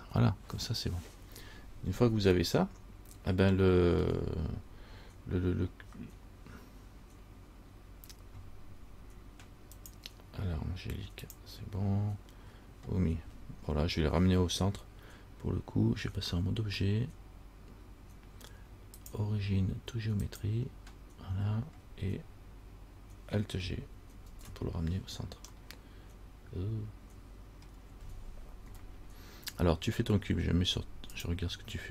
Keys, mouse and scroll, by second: 2.6 middle click, 3.5 middle click, 4.1-6.7 scroll down 1, 16.5 Tab, 19.2 click, 20.6 click, 24.5 alt+g, 25.9 middle click, 25.9 scroll up 1, 27.9 scroll down 1, 28.9 KP_1.